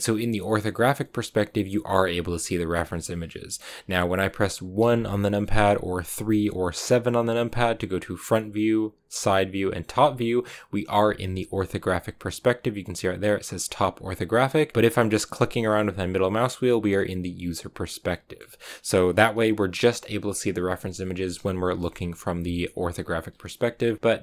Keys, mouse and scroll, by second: 4.7 KP_1, 6.1 KP_3, 6.7 KP_7, 8.1 KP_1, 9.1 KP_3, 9.8 KP_7, 14.8-19.7 middle drag, 19.7 KP_1, 21.7 KP_3, 22.2 KP_7, 23.1 KP_1, 23.9-24.2 middle drag.